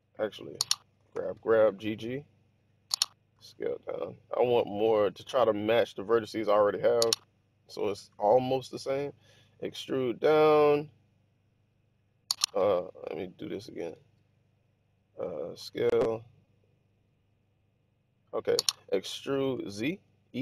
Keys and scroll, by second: 0.8 g, 1.0 g, 3.2 typing, 9.5 typing, 12.8 super+z, 13.9 super+z, 15.5 s, 18.8-20.0 typing.